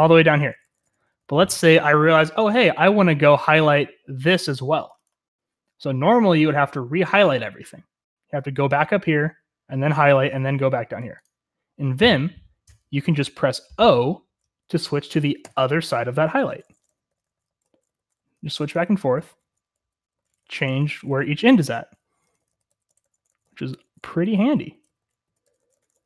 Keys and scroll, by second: 0.0-1.7 typing, 15.4-26.0 typing.